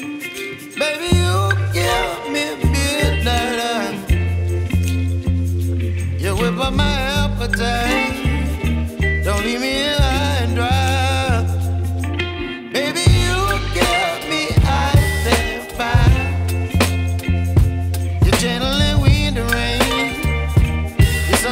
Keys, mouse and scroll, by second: 4.5-5.3 scroll up 1, 6.0-6.3 scroll down 1, 6.3 right click, 6.8 Tab, 7.6 scroll up 1, 7.9 right click, 8.2 scroll up 1, 9.1 right click, 9.4 scroll down 1, 9.5 scroll up 1, 10.1 ctrl+shift+click, 11.1-12.4 right drag, 12.4 scroll down 1, 12.6 scroll up 1, 13.4 ctrl+shift+click, 14.2 right click, 15.0-15.5 scroll up 1, 18.4 Return, 18.6 scroll down 1, 21.2 right click.